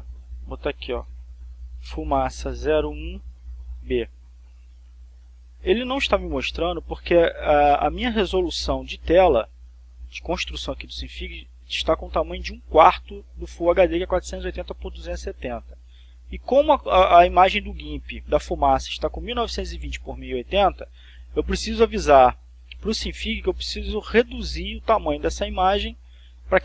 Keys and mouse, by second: 0.0 click, 1.2-2.3 typing, 3.5-4.9 typing, 5.8 click, 7.1 click.